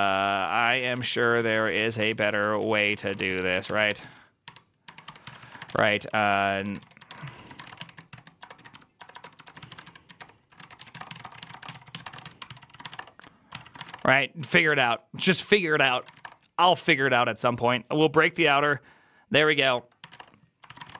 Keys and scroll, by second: 0.6-14.6 typing, 13.4 ctrl+c, 14.4 ctrl+c, 14.7 Return, 15.8 ctrl+c, 15.9 typing, 16.1 Return, 20.3-20.9 typing.